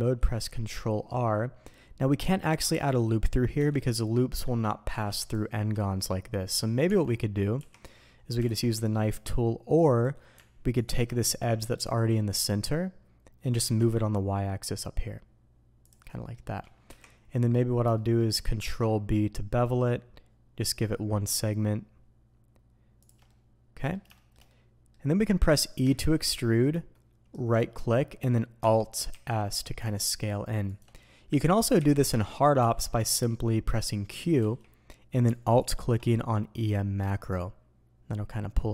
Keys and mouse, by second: 7.7-38.7 drag.